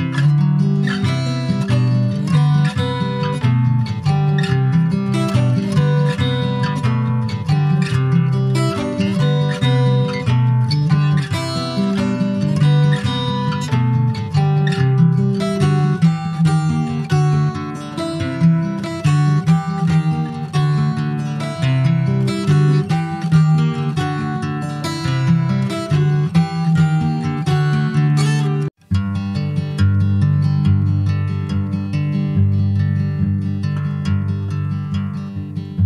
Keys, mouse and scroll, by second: 0.8 click, 2.6 /, 3.0 middle click, 3.5 Tab, 3.8-4.3 scroll up 1, 4.6 ctrl+s, 4.7 click, 5.3 click, 5.6 Tab, 6.6 ctrl+1, 7.2 click, 7.6-8.6 middle drag, 8.6 ctrl+s, 8.8 click, 9.3 /, 10.3 click, 11.0 shift+middle click, 11.6 scroll down 2, 11.8 ctrl+s, 12.1 click, 13.6 ctrl+s, 14.0 ctrl+a, 15.0 scroll down 5, 15.4 shift+middle click, 16.1 ctrl+s, 16.3-17.7 scroll up 3, 18.0 shift+d, 19.3 s, 24.0 click, 24.3-24.6 scroll down 2, 24.6 middle click, 25.0 click, 25.4-26.6 middle drag, 26.6 ctrl+s, 26.8 click, 27.0-28.2 scroll up 4, 27.4 shift+middle click, 28.2 ctrl+s, 28.2 click, 28.9 alt+middle click, 29.3 alt+middle click, 30.2 Tab, 32.9 Tab, 33.5 click, 35.0 ctrl+s, 35.6 click.